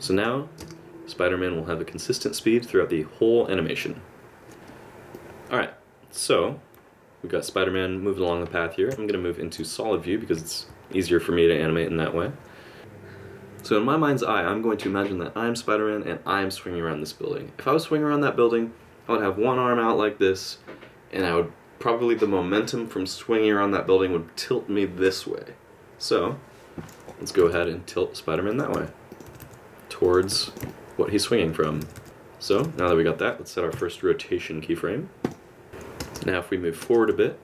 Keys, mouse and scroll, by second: 0.1 click, 0.6 space, 4.5 space, 5.1 click, 8.9 z, 27.4 r, 28.7 r, 30.3 r, 30.7 middle click, 31.8 r, 32.6 r, 33.7 i, 35.7 click, 36.0 space, 36.8 space, 37.2 middle click.